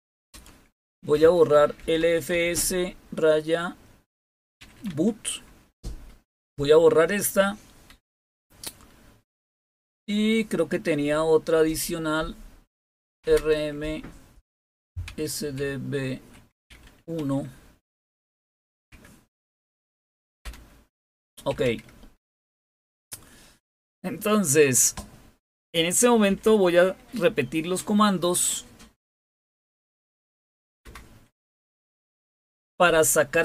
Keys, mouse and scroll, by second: 0.0-2.8 typing, 4.6 typing, 7.9 Return, 12.8-17.2 typing, 18.9 Tab, 20.4 Return, 21.2-22.9 typing, 26.0-26.9 typing, 28.8-30.8 typing.